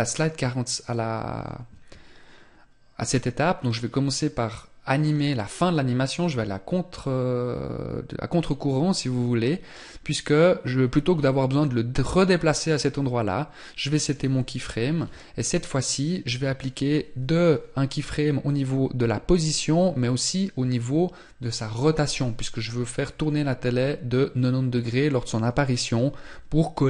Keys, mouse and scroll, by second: 10.0 scroll down 1, 12.2 scroll down 2.